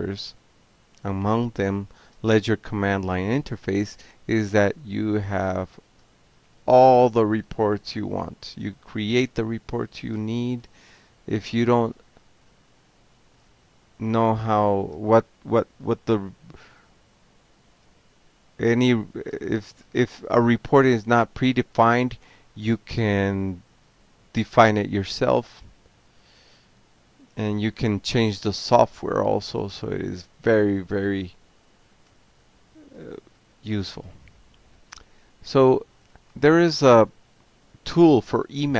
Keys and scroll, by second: 0.0-2.6 typing, 2.7 Return, 3.9 a, 4.2 Tab, 4.7 Tab, 5.9 alt+q, 7.2 ctrl+x, 7.9 o, 8.8 Down, 8.9 Down, 9.0-9.9 Down, 10.2 Down, 10.9 Down, 11.9 ctrl+x, 12.1 o, 14.0 ctrl+c, 14.1 ctrl+a, 14.8-15.7 typing, 20.1-24.7 typing, 25.6 Return, 25.9 Tab, 27.2 shift+e, 27.4 Tab, 27.8 Tab, 29.2-38.1 typing, 31.5 Return.